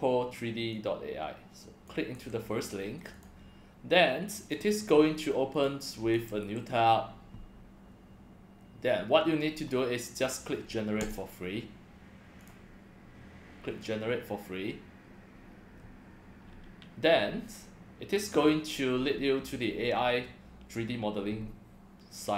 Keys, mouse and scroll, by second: 0.7-1.9 drag, 2.1 c, 3.1 click, 4.4 click, 5.5 click, 6.1 ctrl+v, 6.4 Return, 9.5 scroll down 3.